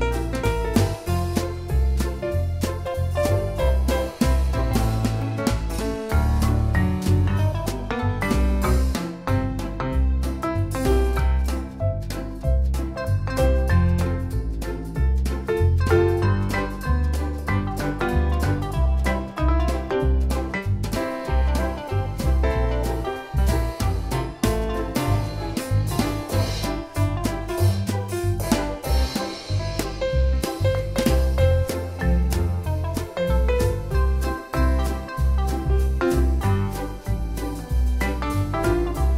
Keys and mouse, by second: 4.6 right click, 7.0 click, 8.7 click, 10.0 right click, 11.6 click, 13.5 click, 14.1 right click, 15.8 click, 17.0 space, 17.2 click, 17.4 space, 18.5 click, 18.7 space, 19.0 click, 20.1 click, 20.7 click, 21.3 click, 23.5 b, 24.6 click, 25.7 ctrl+z, 26.2 click, 27.6 click, 27.8-28.2 typing, 30.8 ctrl+u, 31.2 click, 36.2 right click, 37.9 click.